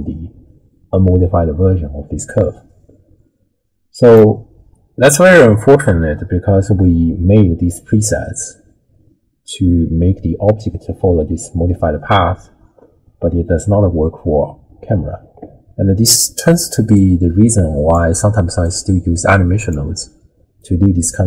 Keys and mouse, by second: 16.9-17.9 drag, 18.7-19.7 drag, 20.8 middle click.